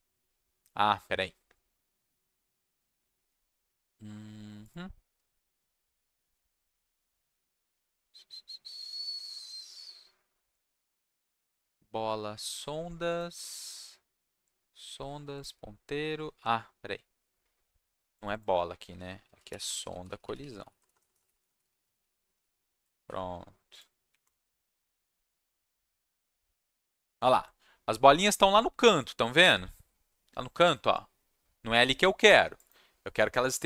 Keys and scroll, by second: 19.0-22.8 typing, 22.9 ctrl+s, 24.1 Up, 24.2 Return.